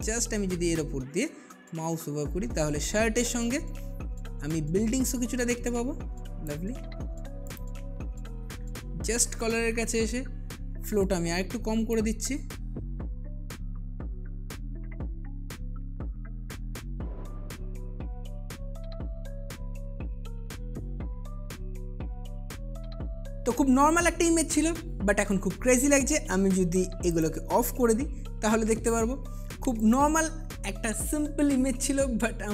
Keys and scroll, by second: 9.5 [, 9.7 [, 9.8 [, 13.7-19.1 typing, 21.4 space, 22.3 space, 23.1 space.